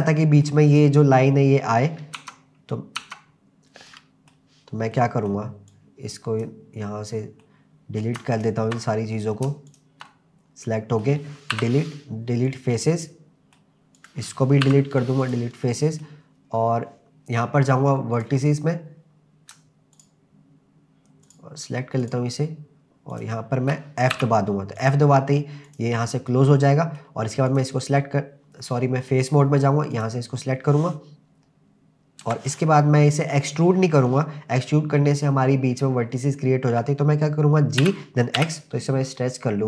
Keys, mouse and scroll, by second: 0.0 middle click, 2.2 Tab, 3.0 Tab, 3.9 middle click, 4.9 middle click, 5.7 click, 7.1 scroll down 1, 7.4 middle click, 8.4 shift+click, 8.7 middle click, 9.7 shift+click, 10.1 middle click, 11.5 Delete, 12.9 middle click, 14.0 click, 14.7 Delete, 15.7 middle click, 16.4-17.0 scroll up 2, 18.1 click, 20.0 shift+click, 21.3 shift+click, 22.0 shift+click, 23.1 shift+click, 24.1 f, 24.8 click, 25.7 click, 26.0-27.0 middle drag, 27.5 click, 29.2 click, 29.9 click, 32.2 KP_0, 37.8 g, 38.4 x.